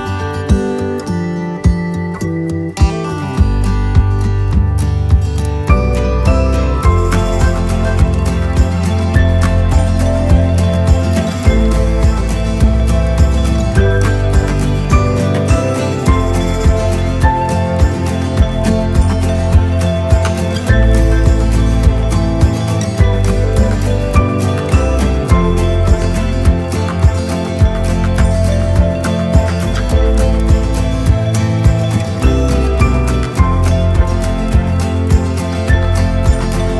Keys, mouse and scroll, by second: 0.8-2.0 typing, 3.3-4.5 typing, 4.9 click, 6.3 right click, 8.3-15.5 right drag, 17.4 click, 18.7 click, 20.5 click, 27.3 click, 30.7 right click, 33.2 click, 33.5 click, 33.7 click, 34.5 click, 34.6 click, 34.8 click.